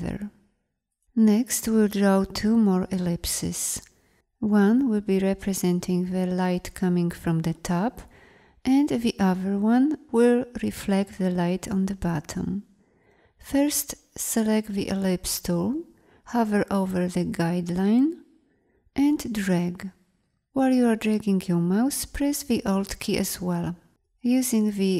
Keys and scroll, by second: 13.7 l.